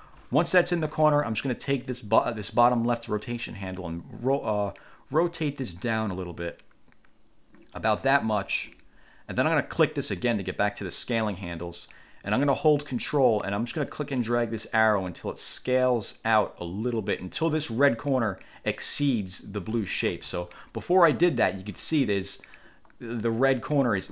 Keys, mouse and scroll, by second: 0.2 ctrl+z, 3.1-8.1 drag, 10.4 click, 14.3 ctrl+click, 20.3 ctrl+z, 20.8-21.6 ctrl+scroll up 3.